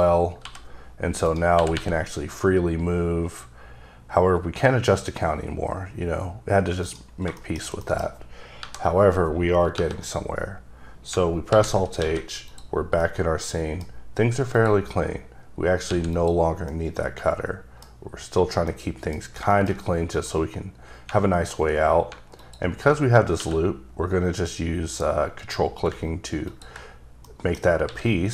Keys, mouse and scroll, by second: 0.4 g, 1.2 right click, 1.6 r, 1.7 r, 6.8 right click, 7.3 shift+middle click, 8.5 KP_Divide, 11.5 alt+h, 11.9-12.2 scroll down 3, 12.0 alt+a, 12.4 click, 13.0 middle click, 14.5 click, 15.3-15.9 scroll up 1, 15.9 x, 16.1 click, 16.7 middle click, 18.0 scroll up 1, 18.7 middle click, 19.2 scroll down 2, 19.5 middle click, 19.7 scroll up 2, 20.1 click, 21.5-22.1 scroll up 4, 22.4 alt+click, 23.1-23.4 scroll down 1, 23.4 q, 25.9 q, 26.5 ctrl+click, 27.2 middle click, 27.8 s.